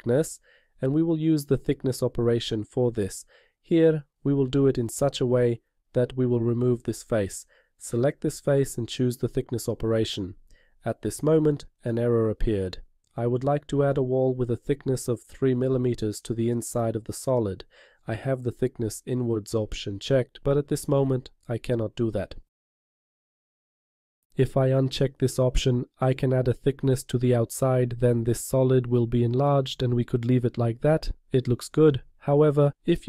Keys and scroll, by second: 16.7 BackSpace, 16.9 3.